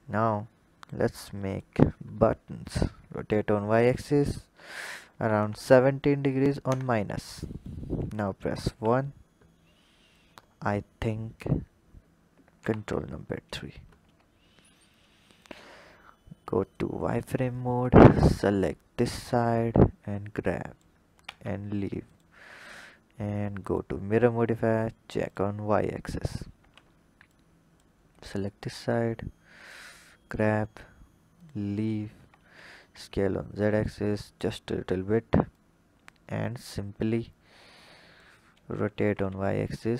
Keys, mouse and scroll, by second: 0.0 click, 1.2 click, 2.6 r, 8.2 KP_1, 9.9-10.9 drag, 10.9-12.3 scroll up 4, 12.3 ctrl+KP_3, 13.1-13.8 scroll up 4, 13.8 Tab, 14.7-16.6 drag, 17.0-17.7 scroll up 2, 17.7 click, 19.3 click, 21.1 Tab, 21.9-24.7 drag, 25.0 click, 26.4 Tab, 27.1 click, 28.3 click, 31.2 click, 31.9 Tab, 32.3 s, 35.3 click, 36.1-37.6 scroll down 4, 37.6 click, 38.6 r.